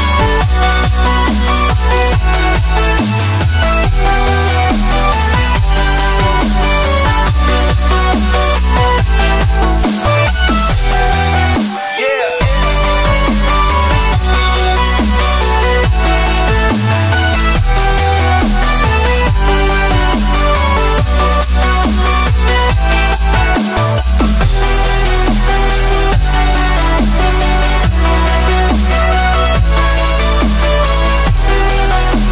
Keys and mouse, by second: 2.5-4.2 middle drag, 5.0-8.3 drag, 9.0-10.5 middle drag, 11.7 r, 17.3 s, 20.8-22.4 drag, 25.2 click, 26.4 shift+d, 28.6 g.